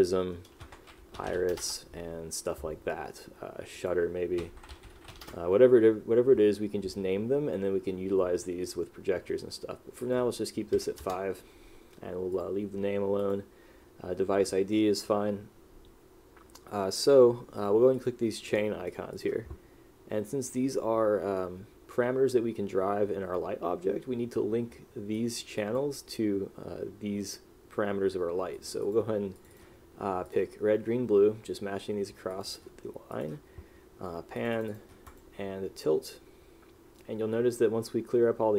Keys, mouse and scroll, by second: 1.3 r, 1.5 s, 1.7 Return, 4.5 s, 5.2 e, 5.3 Return, 11.2 Return.